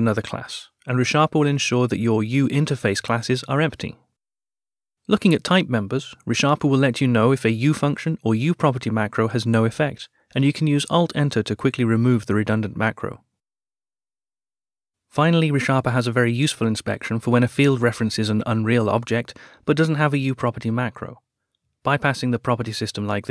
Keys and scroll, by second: 10.4 alt+Return, 18.1 ctrl+alt+/.